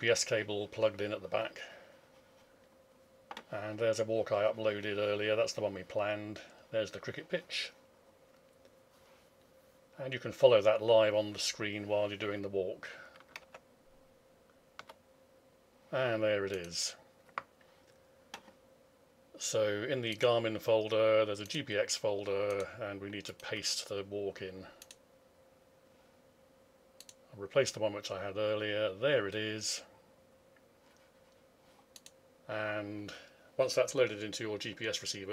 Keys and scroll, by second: 13.4 alt+Tab.